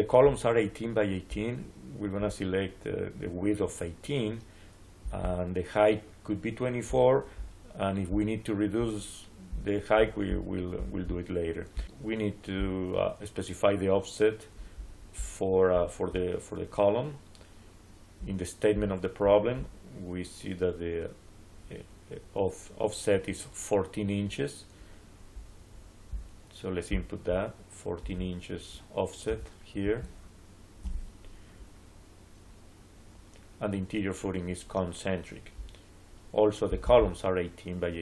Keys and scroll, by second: 29.1 1, 29.7 4, 30.7 Return.